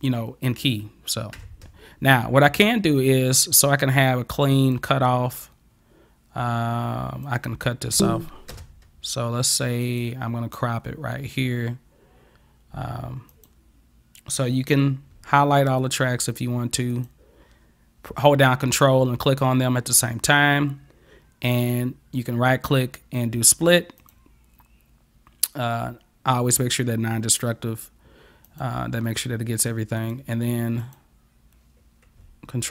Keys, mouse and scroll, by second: 1.6 space, 3.0-4.8 drag, 7.3 click, 8.0 space, 8.5 space, 9.9 click, 13.3 click, 15.8 ctrl+click, 16.9 ctrl+click, 21.5 right click, 24.0 click, 28.5 click, 30.0 click, 30.8 click.